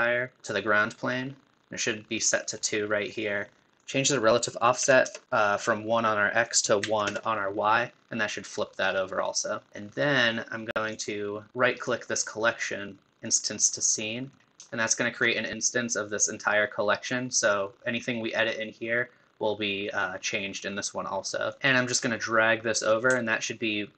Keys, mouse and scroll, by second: 3.8-8.9 drag, 8.9-9.2 scroll down 6, 9.2-9.7 middle drag, 9.7-10.9 scroll up 1, 10.9-11.7 drag, 11.7-14.0 right drag, 14.0-17.9 middle drag, 21.5 click, 21.6 ctrl+z, 21.9 click.